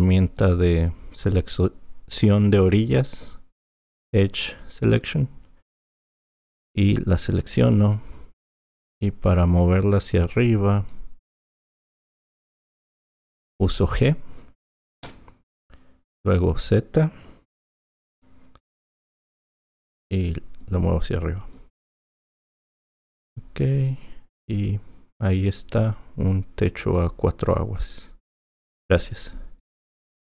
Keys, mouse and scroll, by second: 0.4-3.4 drag, 7.5 click, 8.4 click, 15.0 g, 21.5 click, 28.4 click.